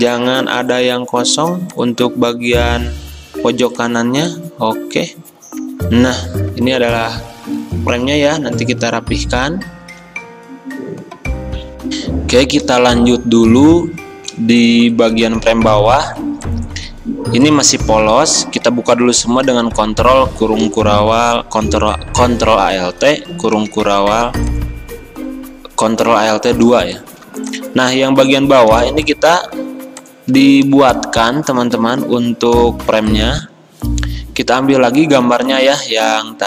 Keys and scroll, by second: 5.7 f, 9.8 Escape, 11.9 F9, 11.9 alt+Tab, 20.1 alt+2, 26.7 v, 28.0 ctrl+z, 35.4 alt+Tab.